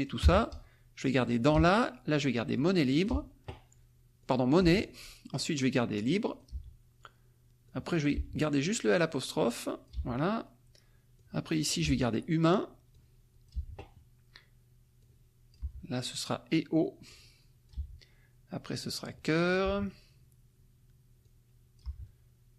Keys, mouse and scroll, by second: 0.2 BackSpace, 1.2 click, 1.5 BackSpace, 2.5 click, 3.1 BackSpace, 4.2 click, 4.6 BackSpace, 5.9 click, 6.5 BackSpace, 7.6 click, 8.1 BackSpace, 9.3 click, 9.9 BackSpace, 11.1 click, 11.8 BackSpace, 12.9 click, 13.5 BackSpace, 15.0 click, 15.6 BackSpace, 17.1 click, 17.8 BackSpace, 19.1 click, 19.6 BackSpace, 21.2 click, 21.8 BackSpace.